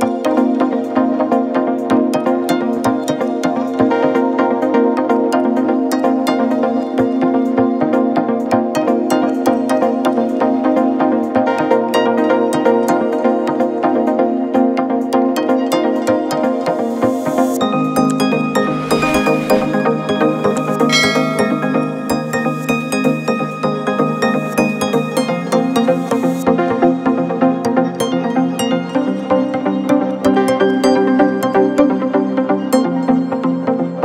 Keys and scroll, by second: 1.3 ctrl+v, 2.2 a, 13.9 1, 13.9 0, 14.0 0, 16.2 v, 18.9 1, 19.1 5, 20.5-21.7 typing, 26.1 Down, 26.4 Down, 26.5 Down, 26.7 Down, 26.9 Down, 27.1 Down, 27.2 Down, 28.2 Down.